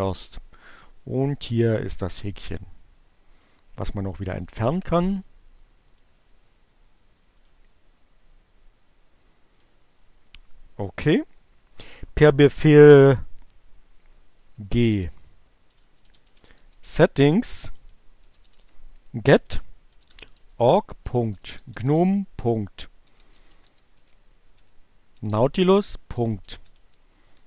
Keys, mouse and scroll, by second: 3.1 click, 4.3 click, 6.0 click, 7.4 click, 9.2 click, 10.2 click, 13.1-14.1 typing, 15.6-16.7 typing, 18.0-24.5 typing, 25.9-27.2 typing.